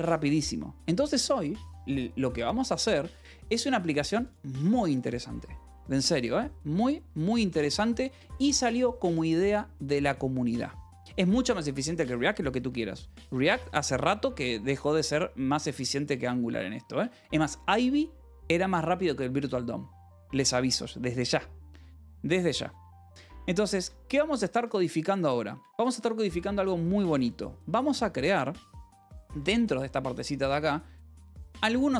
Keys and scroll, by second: 5.8 u, 6.0 Escape, 6.6 u, 7.1 Escape, 8.1 ctrl+r, 8.4 =, 12.4 k, 14.0 Return, 14.2-16.7 typing, 16.0 Return, 16.9 Return, 20.3 j, 21.6 :, 22.4 j, 22.8 Return, 24.1-26.7 typing, 28.6-30.5 typing.